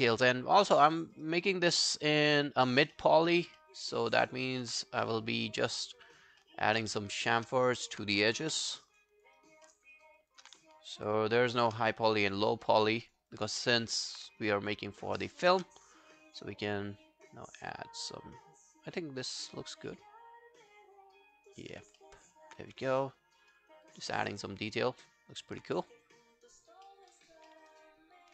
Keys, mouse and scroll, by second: 1.0 alt+middle click, 1.3 alt+right click, 1.5 alt+click, 3.0 alt+middle click, 3.2 alt+right click, 3.6 alt+middle click, 3.9 alt+right click, 4.2 alt+middle click, 4.4 alt+right click, 6.4 alt+middle click, 7.2 shift+click, 7.3 shift+click, 7.7 alt+click, 8.5 f, 8.8 alt+scroll down 1, 9.0 alt+click, 9.4 alt+right click, 9.7 alt+middle click, 10.0 alt+right click, 10.2 alt+click, 11.0 shift+click, 11.9 alt+click, 12.3 alt+right click, 12.5 alt+click, 13.0 alt+right click, 13.3 alt+click, 13.7 alt+right click, 14.0 alt+click, 14.4 shift+right click, 22.0 alt+middle click, 22.3 alt+scroll down 1, 22.7 w, 22.9 right click, 24.1 alt+scroll down 1, 24.3 alt+click, 26.2 alt+click, 26.9 alt+middle click, 27.1 alt+right click, 27.5 alt+middle click, 27.7 alt+right click.